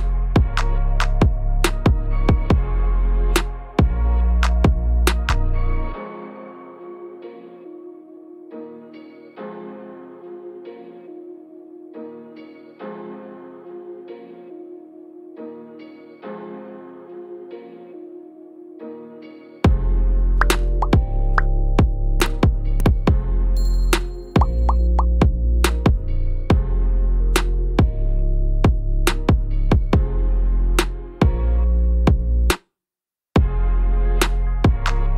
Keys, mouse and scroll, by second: 4.3 shift+middle click, 4.5 shift+s, 9.0 shift+s, 11.4-11.8 scroll down 2, 11.8 middle click, 16.7 KP_7, 18.0 scroll, 18.1-18.7 scroll down 2, 18.8 middle click, 19.7-20.1 scroll up 2, 20.5 scroll up 1, 21.0 shift+middle click, 22.4 shift+d, 25.7 click, 25.8 shift+middle click, 26.6 shift+d, 27.8 scroll down 3, 28.1 scroll up 1, 28.3 shift+d, 30.2 shift+d, 32.5 scroll down 3, 32.7 middle click, 32.9 scroll up 1, 33.0 shift+middle click, 33.5-34.0 scroll up 2, 33.6 shift+middle click, 34.0 scroll down 2, 34.2 click, 34.4 middle click.